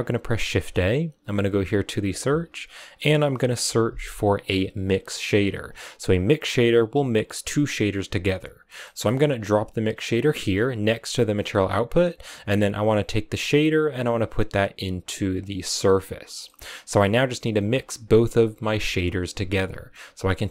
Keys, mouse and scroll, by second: 0.3 shift+a, 8.7 middle click, 8.9-9.8 scroll up 10, 9.8 click, 10.9 click, 13.3 click, 15.7 click, 16.2-17.3 scroll down 6, 16.3 middle click, 17.3 scroll down 1, 17.6-19.6 scroll up 1.